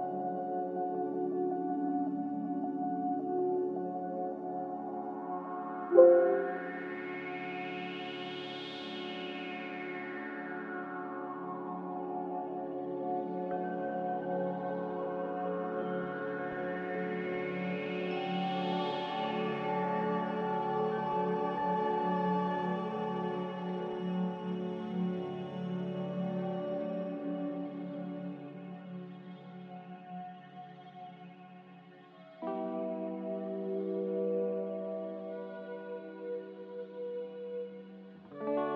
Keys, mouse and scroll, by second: 1.4 z, 3.1-5.0 typing, 7.8-8.6 typing, 11.0 click, 12.2 a, 14.3 click.